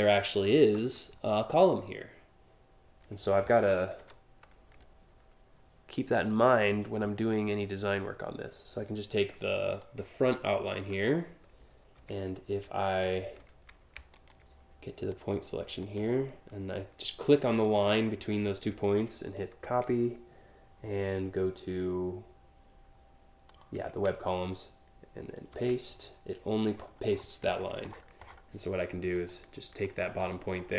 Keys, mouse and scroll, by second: 1.0 click, 9.4 click, 10.4 scroll down 1, 12.7 shift+click, 13.8 ctrl+click, 14.8 click, 15.5 click, 17.2 click, 19.2 ctrl+c, 23.1 click, 25.2 ctrl+v, 26.4-28.0 scroll up 8, 28.8 click, 29.8 scroll down 1, 30.2 alt+scroll up 1.